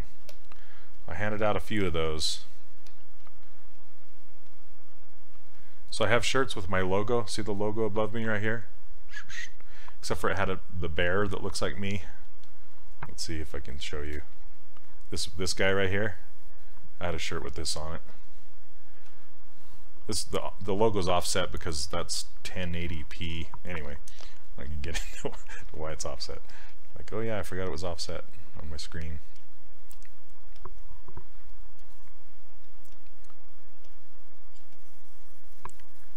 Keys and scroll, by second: 0.3 s, 2.8 s.